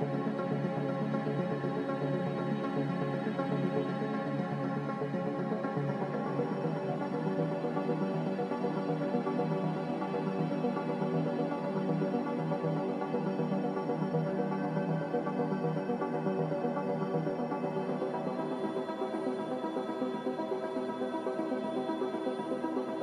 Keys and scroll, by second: 3.4 a, 10.3 typing, 11.4-12.3 typing, 11.6 Return, 17.6 z, 20.1 typing, 20.2 Return.